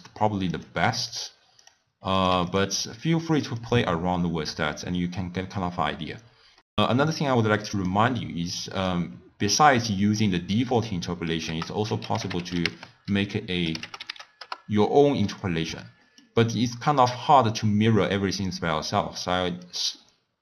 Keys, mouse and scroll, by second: 1.6 click, 2.2 click, 3.5-6.6 drag, 6.6-7.5 middle drag, 7.5 click, 8.5-9.9 drag, 9.9 x, 10.2 click, 11.4 ctrl+a, 15.7-18.7 middle drag, 18.9 click, 19.6 click.